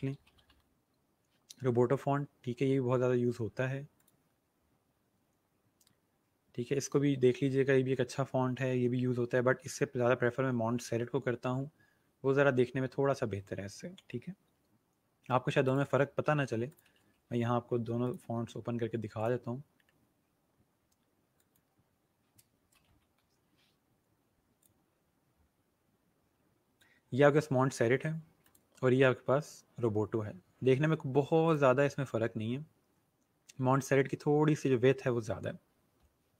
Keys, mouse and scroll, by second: 0.0-0.9 typing, 3.3 scroll down 1, 3.9 click, 5.9 scroll down 1, 11.4 scroll up 1, 15.6 click, 16.2 ctrl+c, 16.7 click, 17.0 ctrl+v, 17.7 Return, 18.0 click, 20.8 scroll up 1, 21.3 click, 22.3-23.4 typing, 24.6 click, 25.6 scroll down 1, 28.5 click, 28.9 scroll down 1, 31.4 click, 32.2 scroll down 1.